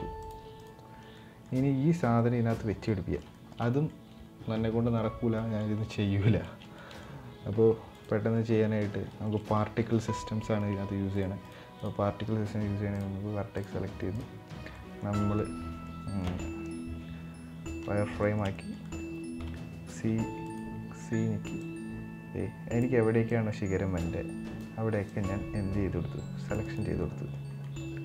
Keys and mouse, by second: 0.4 right click, 0.9 middle drag, 1.9 middle click, 2.6-2.9 middle drag, 3.0 shift+middle click, 3.4 middle click, 5.1 middle click, 6.1 shift+middle drag, 6.5 middle click, 7.7 click, 8.1 Tab, 8.8 shift+middle click, 9.1 middle click, 11.5 right click, 12.7 click, 13.3 click, 13.9 right click, 14.5 middle click, 14.9 middle click, 15.4 z, 17.9 middle click, 18.2 shift+middle click, 18.6 middle click, 19.1 v, 20.6 c, 26.6-27.1 middle drag, 27.3 middle drag.